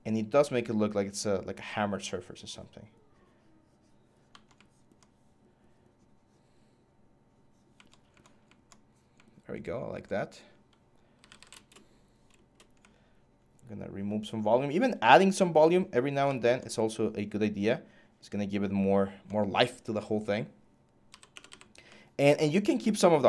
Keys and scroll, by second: 10.7-11.5 typing, 20.6-21.7 typing.